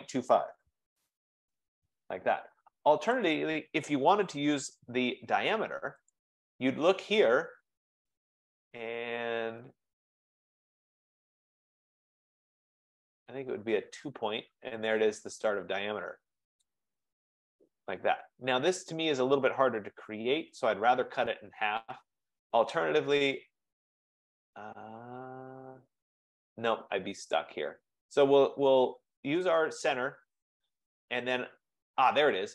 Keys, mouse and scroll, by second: 0.1-1.4 typing, 3.4 click, 3.9-4.9 typing, 6.3 click, 13.1 click, 16.7 click, 18.3 F15, 20.7 Escape, 27.4 click, 29.7 click.